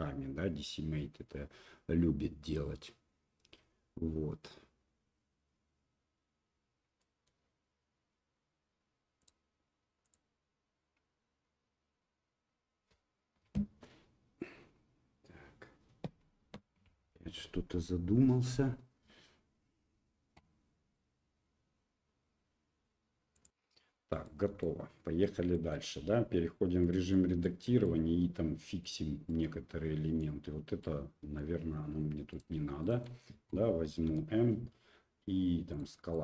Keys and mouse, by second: 10.2-16.4 right drag, 16.4-23.5 drag, 24.2-24.6 middle drag, 25.5 shift+middle click, 26.0 Tab, 26.8 middle click, 27.4 shift+middle click, 27.8-28.8 middle drag, 29.3 middle click, 30.8 middle click, 30.9 click, 31.2 middle click, 32.3 click, 32.8 shift+click, 34.1 m, 36.1 middle click.